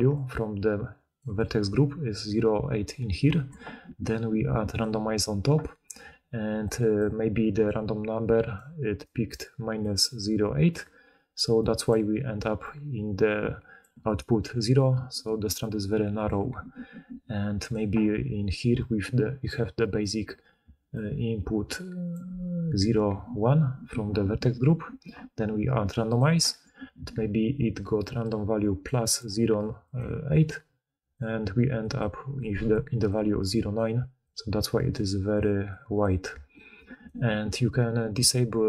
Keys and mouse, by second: 1.1 d, 6.0-13.9 d, 6.5-8.3 drag, 14.9 d, 15.3 d, 15.3-16.3 d, 16.8 d, 17.1 click, 17.1 middle click, 17.1-18.6 right drag, 18.6-20.1 d, 18.7-26.1 drag, 18.7-27.4 right drag, 20.5 d, 22.0 d, 22.1 d, 27.1-37.1 d, 27.4 click, 27.5-29.5 right drag, 27.9-29.5 drag, 27.9-29.5 middle drag, 32.6-34.9 drag, 32.6-34.9 middle drag, 32.6-34.9 right drag, 38.3 d.